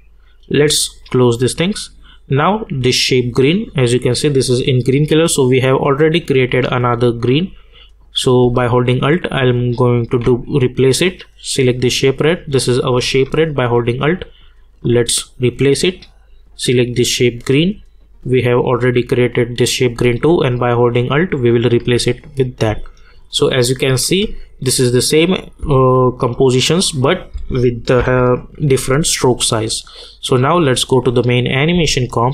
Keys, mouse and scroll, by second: 8.9 alt+Num_Lock, 8.9-11.2 alt+drag, 13.5-16.5 alt+drag, 18.8 click, 20.2-25.6 alt+drag, 25.6 space, 28.0 -, 29.2-30.9 drag, 31.7 space.